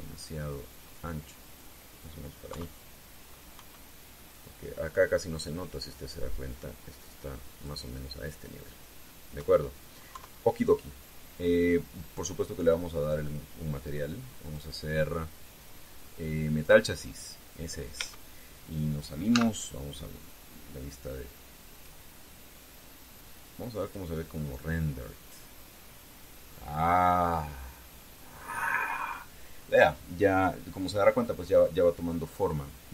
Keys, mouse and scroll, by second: 3.2 KP_3, 4.3 KP_1, 6.2-8.6 drag, 10.1 KP_1, 10.9 KP_3, 11.7 scroll down 2, 14.0 click, 15.1 click, 17.3 click, 18.7 Tab, 20.1 z, 22.5 click, 24.6 click, 25.8-26.5 scroll down 4.